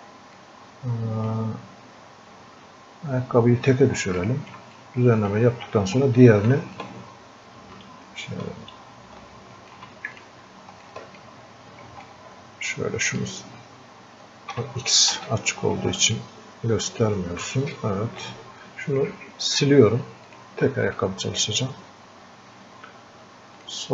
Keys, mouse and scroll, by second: 0.4-3.2 drag, 3.2 scroll up 1, 4.2 alt+click, 4.8-6.8 drag, 6.8-10.2 ctrl+alt+drag, 10.2 ctrl+click, 12.1-15.9 ctrl+alt+drag, 16.2-17.8 ctrl+alt+shift+drag, 17.8-23.9 drag, 21.3-23.6 drag.